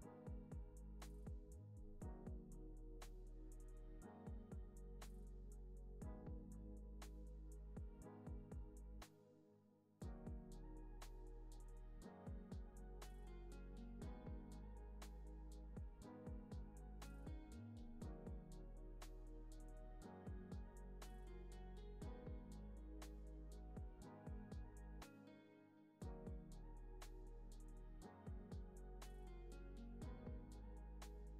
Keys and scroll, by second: 5.3 p, 17.4 p, 24.0 p.